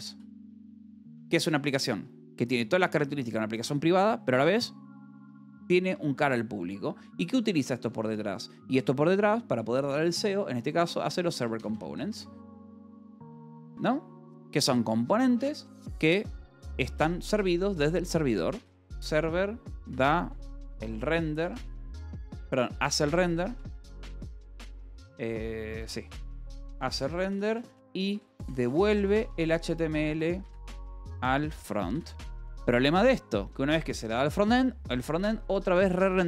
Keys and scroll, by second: 0.0-1.6 typing, 7.2-8.2 typing, 10.1-12.9 typing, 13.6 Escape, 16.8 a, 16.9 space, 17.9-24.8 typing, 25.9-32.2 typing.